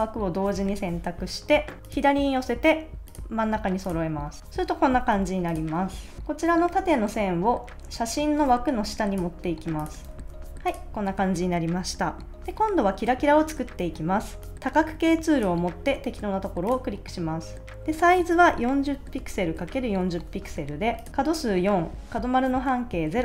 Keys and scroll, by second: 5.1 super+s, 10.1 super+s, 18.8-20.4 typing.